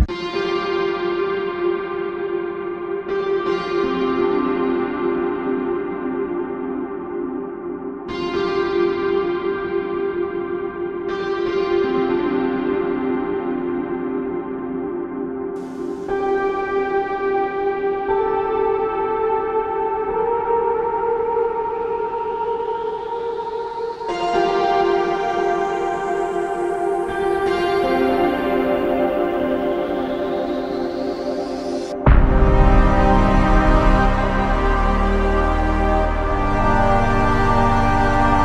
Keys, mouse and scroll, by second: 9.1 f, 9.1 ctrl+z, 19.1-19.5 typing, 28.3-28.8 typing, 29.5-29.9 scroll down 1, 29.9-30.4 scroll up 1, 35.4 typing, 36.2 alt+click.